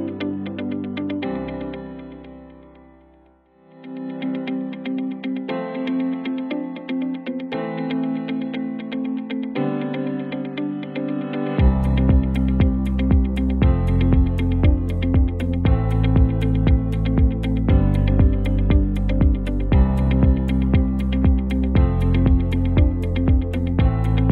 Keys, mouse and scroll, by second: 0.1 alt+scroll down 1, 1.1 click, 1.8 v, 2.7-4.0 alt+drag, 4.0 alt+scroll up 1, 4.6 space, 4.7-5.2 click, 5.2 alt+scroll up 1, 5.9 t, 6.2 click, 6.4 ctrl+a, 7.2-10.1 typing, 11.0 click, 11.4 space, 11.5-12.0 click, 11.9 space, 12.2 alt+scroll down 2, 12.9 space, 13.1-13.4 click, 13.7 v, 14.5-16.1 alt+drag, 16.3 t, 16.7 click, 16.9 ctrl+a, 17.8-23.2 typing, 24.2 click.